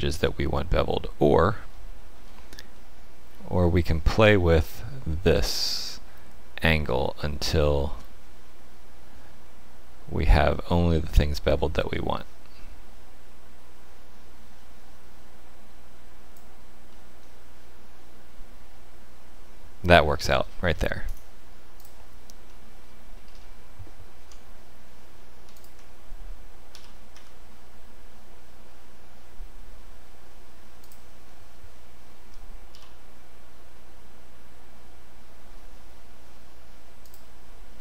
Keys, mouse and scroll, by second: 1.7 shift+middle click, 2.7 middle click, 5.8 shift+click, 16.9 middle click, 20.3 scroll down 2, 21.0 right click, 21.0-22.1 scroll down 1, 22.4 shift+middle click, 23.2-24.2 scroll up 2, 24.2 Tab, 24.2 scroll up 1, 25.5 alt+click, 26.7 e, 32.2 f, 32.7 e, 37.7 Tab, 37.7 shift+middle click, 37.7 click, 37.7-37.8 scroll down 9.